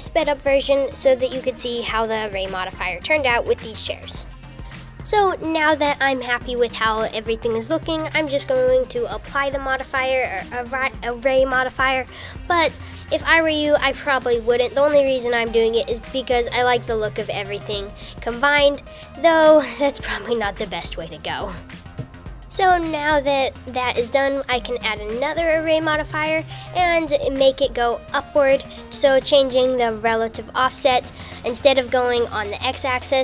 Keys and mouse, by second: 0.3 Tab, 0.5-3.0 typing, 0.6 Tab, 1.0 click, 1.6 shift+click, 3.3 Tab, 3.3 click, 4.2 shift+click, 4.4 KP_7, 5.0 click, 12.7 super+a, 14.4 click, 16.5 super+a, 23.6-24.2 drag, 29.1-30.2 drag, 30.8 super+z, 31.7-33.2 drag.